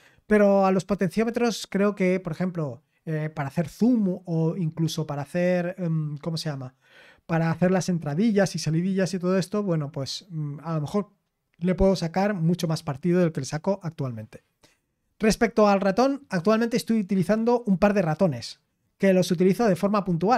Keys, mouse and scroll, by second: 11.8-20.3 scroll down 2.